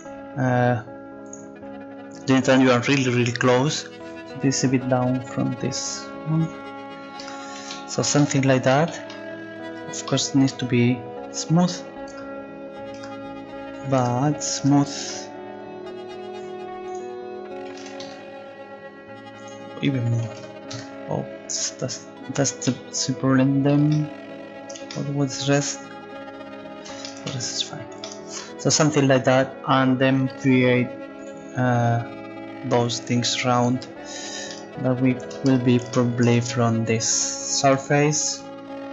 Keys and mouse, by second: 5.5-7.3 drag, 7.3 Tab, 9.7 Tab, 11.3-13.1 drag, 12.1 Tab, 13.0 Tab, 14.0 Tab, 14.6 Tab, 15.1 Tab, 16.9-21.6 drag, 22.9-25.2 middle drag, 35.5 Tab, 37.8-38.9 right drag.